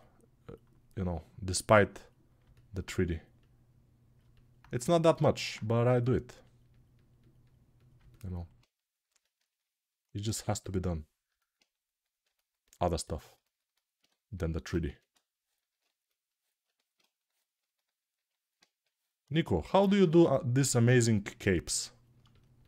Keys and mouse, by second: 8.3-12.9 right drag, 14.6 x.